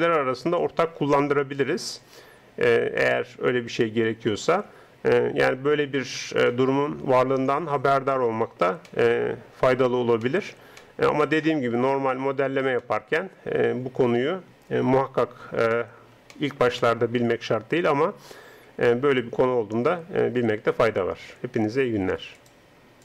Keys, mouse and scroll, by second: 16.3-18.9 middle drag.